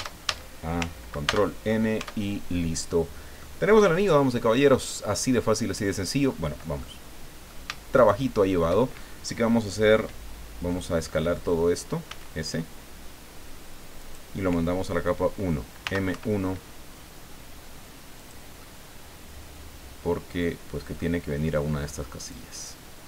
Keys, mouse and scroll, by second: 1.2 ctrl+n, 2.0 ctrl+Tab, 2.9-3.2 scroll down 2, 3.4-4.5 drag, 6.2 scroll up 2, 6.8 click, 7.9 shift+right click, 12.1 s, 14.0 click, 15.8 m, 16.1 1, 18.2 click, 18.8-19.8 scroll down 6, 20.5 click, 22.3-23.0 drag.